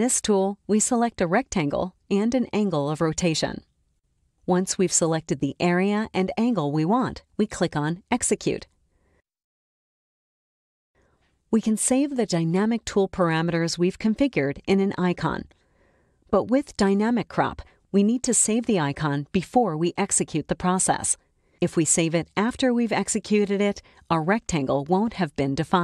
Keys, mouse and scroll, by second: 1.1-2.8 drag, 3.5-5.6 drag, 10.0 click, 11.5-14.8 drag, 20.4 click, 23.8 click.